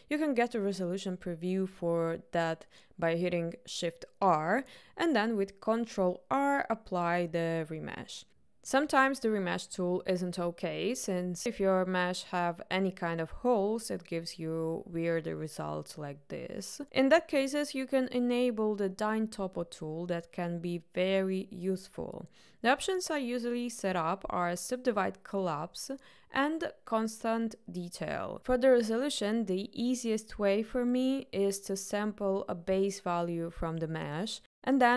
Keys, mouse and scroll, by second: 6.8 ctrl+r, 7.7 click, 8.7-9.7 drag, 10.3 middle click, 11.0 shift+middle click, 12.4 shift+r, 14.4 ctrl+r, 17.8 ctrl+z, 19.5-20.5 drag, 21.4-32.8 drag, 33.7-34.9 drag.